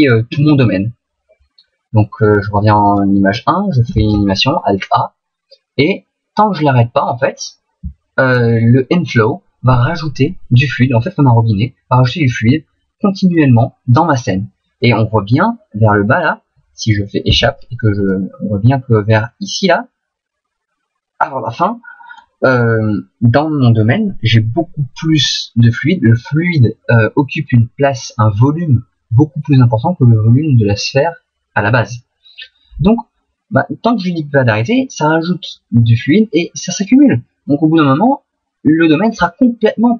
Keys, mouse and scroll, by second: 0.3 Left, 0.5 Left, 0.6 Left, 2.9 click, 3.9 alt+a, 17.3 Escape, 18.1 click.